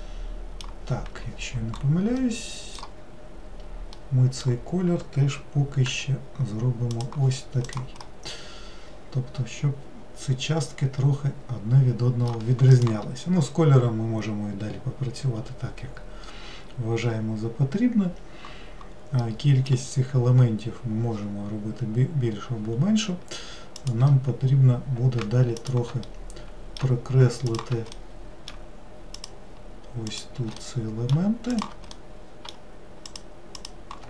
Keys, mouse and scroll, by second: 5.9 g, 7.7 click, 8.1-11.2 middle drag, 19.3-22.3 middle drag, 23.8 click, 25.6 shift+click, 26.1-27.5 middle drag, 27.5 shift+click, 28.0-29.2 middle drag, 29.2 shift+click, 30.1 shift+click, 30.6 middle click, 31.5 shift+click, 32.0-33.1 middle drag, 33.1 shift+click, 33.6 shift+click.